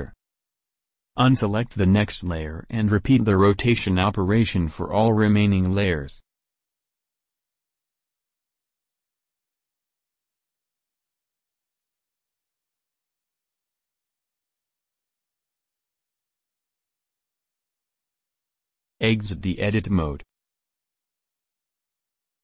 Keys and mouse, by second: 0.0-1.5 drag, 0.8 r, 3.0-4.7 drag, 3.5 r, 6.1-7.7 drag, 6.7 r, 8.5 click, 9.0 r, 10.1 click, 11.5 r, 13.9 r, 14.7 click, 15.6-18.6 drag, 16.1 r, 18.8-20.8 drag, 19.2 Tab, 22.3 alt+Tab.